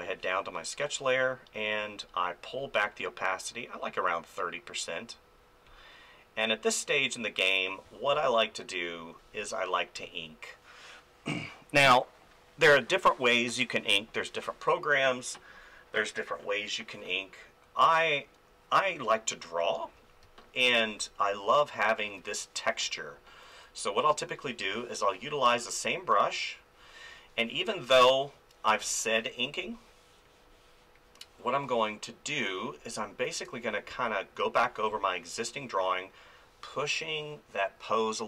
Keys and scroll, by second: 7.8 space, 20.2 space, 23.3 [, 24.3 [, 28.8 ctrl+z, 33.9 space.